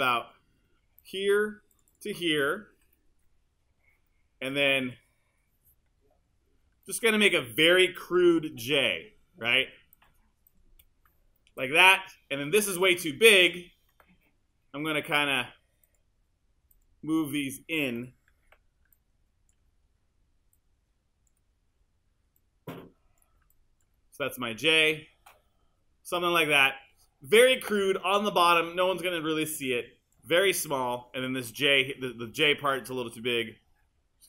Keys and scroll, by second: 3.8 BackSpace, 8.3 q, 11.5 BackSpace, 13.5 BackSpace, 18.3 w.